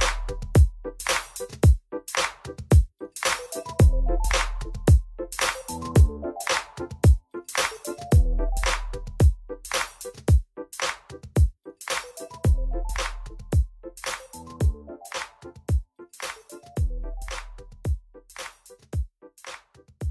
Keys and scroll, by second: 12.1 1, 13.2 3.